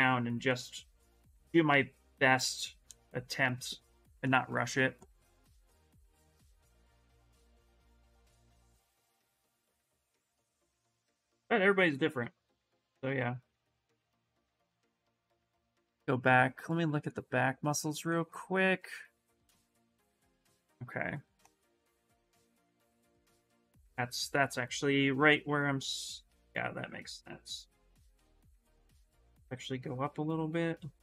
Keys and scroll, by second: 7.6-8.7 typing, 22.9-24.2 typing, 28.1 space, 30.7 s.